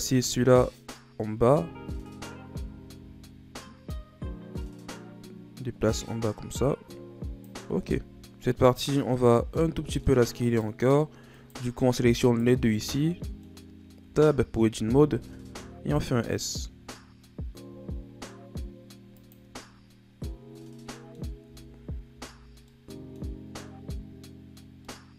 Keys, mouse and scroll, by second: 0.7 right click, 1.4 Tab, 2.6 a, 2.9 a, 3.8-6.9 drag, 7.7 Tab, 8.0 a, 8.2 right click, 8.7-10.4 middle drag, 10.4-11.7 shift+right drag, 12.2 shift+right click, 12.7-14.0 middle drag, 14.0 Tab, 14.6 a, 14.9 a, 15.4 s, 20.5 middle click, 21.4 Tab, 22.1 a, 22.5 scroll down 1, 22.6 middle click, 23.2-24.6 scroll up 4, 24.6 scroll down 3, 24.8-25.1 middle drag.